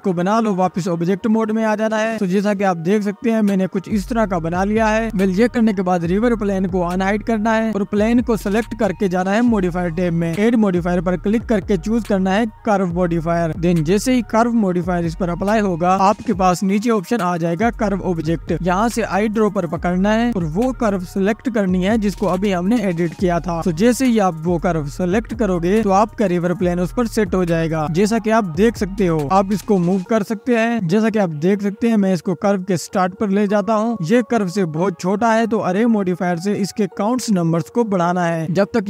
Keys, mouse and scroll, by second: 0.5 click, 1.9 scroll up 1, 2.6 click, 5.5 scroll up 2, 7.3 click, 10.4 scroll down 1, 10.7-13.7 drag, 14.1-15.0 scroll down 8, 18.7 click, 21.8 click, 25.5-26.6 scroll down 4, 26.6 scroll up 2, 27.1-28.9 drag, 28.9-30.0 scroll down 1, 30.0 click, 31.6-33.9 drag, 33.9-35.1 scroll up 1, 35.9-38.8 drag.